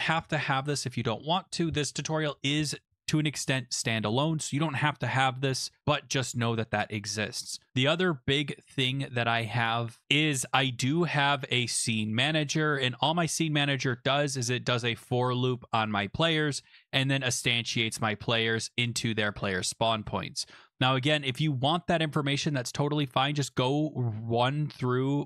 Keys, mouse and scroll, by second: 10.0-11.2 scroll down 7, 11.2 click, 11.4 click, 11.4-12.7 scroll, 15.5 click, 21.3 click, 23.5 click.